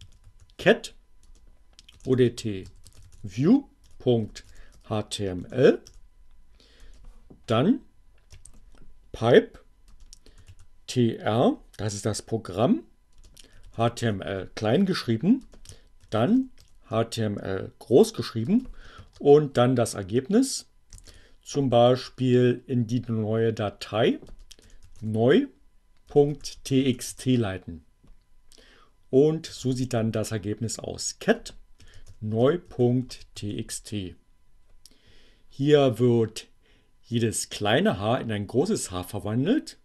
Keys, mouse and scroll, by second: 0.0-4.2 typing, 5.3 BackSpace, 6.4 space, 7.8 alt+<, 10.0-11.0 typing, 13.0-17.1 typing, 18.2 space, 20.6 shift+,, 23.3 space, 23.5 n, 24.7-26.6 typing, 27.0 Return, 28.2-33.9 typing.